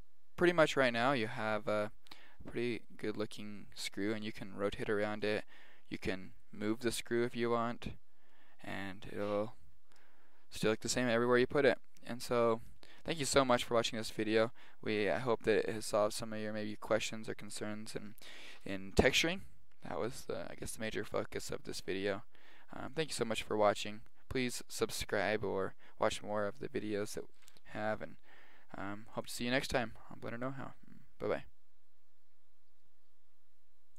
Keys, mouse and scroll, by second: 2.6 middle click, 3.0 click, 3.2-3.6 drag, 3.6 middle click, 3.8 click, 5.4-6.8 right drag, 6.8 g, 7.4 click, 7.7-8.2 right drag.